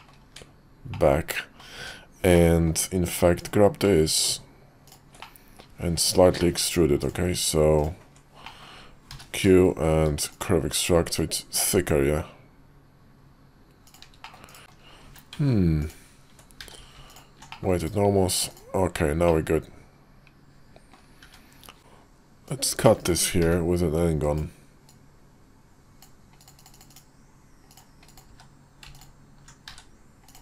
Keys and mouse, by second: 0.1 Tab, 0.9 middle click, 1.7 Tab, 2.3 middle click, 3.3 click, 3.8 middle click, 4.8 ctrl+click, 5.1 middle click, 5.9 ctrl+click, 6.3 middle click, 6.9 ctrl+click, 7.7 ctrl+click, 8.4 middle click, 9.0 q, 14.2 middle click, 14.6 alt+n, 14.6 Tab, 15.0 q, 16.5 q, 17.4 middle click, 17.7 /, 18.4-19.2 drag, 19.2-20.8 middle drag, 21.1 `, 22.4-23.0 drag, 23.3 d, 24.8-26.0 drag, 27.6 click, 28.0 click, 28.2 q, 29.6 q, 30.2 click.